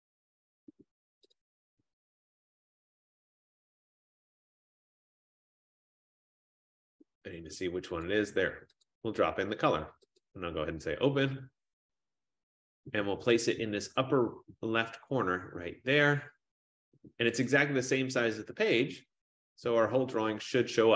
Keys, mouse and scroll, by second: 1.5 click, 1.7 click, 1.8 F15, 3.2 click, 3.4 click, 8.1 click, 9.0 click, 10.3 click, 17.6 click.